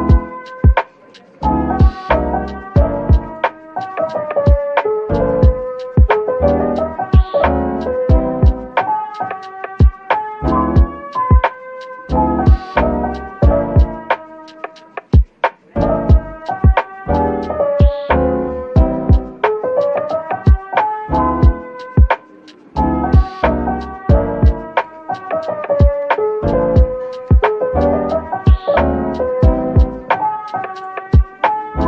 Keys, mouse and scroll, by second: 2.6-6.2 typing, 7.4-9.2 typing, 17.7 double click, 19.3 Tab, 22.0 double click, 22.9 typing, 25.4-26.5 typing, 29.4 scroll down 1, 30.5-31.8 typing, 31.1 scroll down 1.